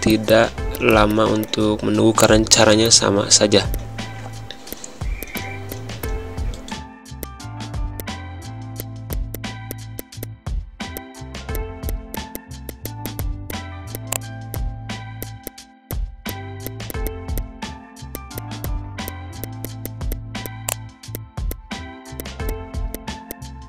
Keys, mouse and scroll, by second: 2.2-5.2 drag, 5.7 space, 6.0 click, 6.3 ctrl+shift+', 7.2 space, 7.2 click, 7.3 space, 7.5 ctrl+z, 8.0 click, 8.4 ctrl+shift+\, 8.7 space, 9.0 z, 9.1 click, 9.3 space, 9.4 click, 9.4 space, 9.7 click, 10.4 ctrl+shift+], 10.7 space, 10.8 click, 10.8 space, 10.9-22.9 drag, 23.3 click.